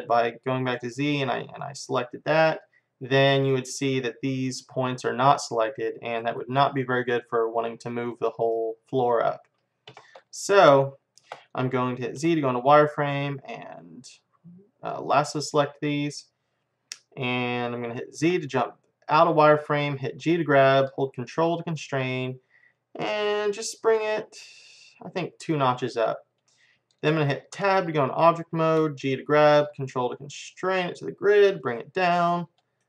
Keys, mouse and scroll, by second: 0.0 z, 0.8-2.5 right drag, 2.5-9.5 middle drag, 2.6 right click, 9.9 KP_1, 12.1 middle click, 12.3 z, 12.5 middle click, 13.0-14.9 right drag, 18.2 z, 20.2 g, 27.6 Tab, 29.0 g, 32.4-32.8 middle drag.